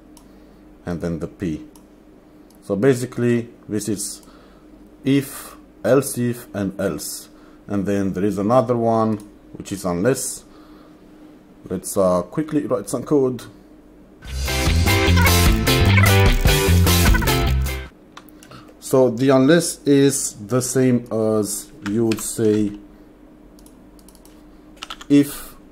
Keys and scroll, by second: 14.7 Return, 14.8-17.9 typing, 18.6 ctrl+s, 22.2 alt+shift+Down, 25.0 f.